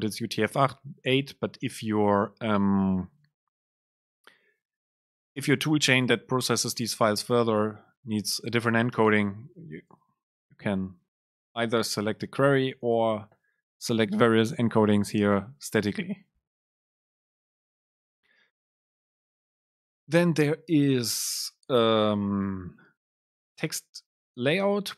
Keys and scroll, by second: 9.1 Return, 10.0 Return, 10.2 super+space, 17.2 BackSpace, 18.3 BackSpace, 18.5 Down, 18.9 End, 20.5 super+space.